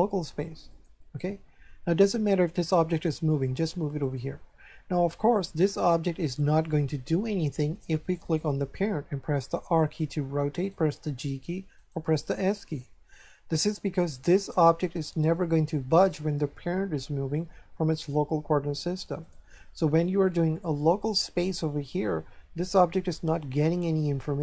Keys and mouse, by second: 0.7 click, 3.2 g, 4.0 click, 8.2 right click, 9.7 r, 10.6 right click, 11.0 g, 11.8 right click, 12.8 s, 13.5 right click, 19.2 right click.